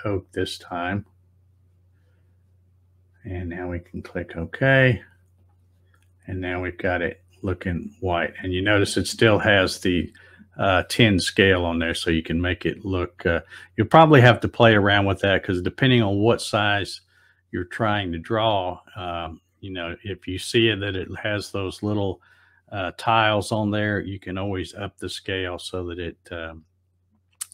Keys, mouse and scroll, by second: 0.9 click, 4.2 click, 5.4 click, 6.3 middle click.